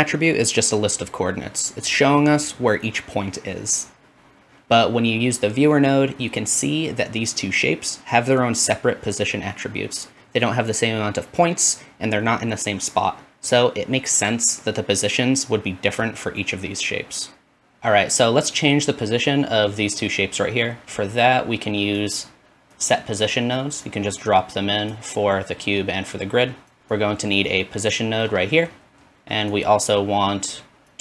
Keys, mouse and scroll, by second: 9.5 ctrl+shift+z, 10.6 ctrl+z, 11.2 ctrl+shift+z, 11.9 ctrl+z, 12.5 ctrl+shift+z, 13.1 ctrl+z, 13.7 ctrl+shift+z, 14.3 ctrl+z, 15.0 ctrl+shift+z, 15.6 ctrl+z, 16.1-31.0 ctrl+shift+drag, 16.3 ctrl+shift+z, 16.9 ctrl+z, 17.4 ctrl+shift+z.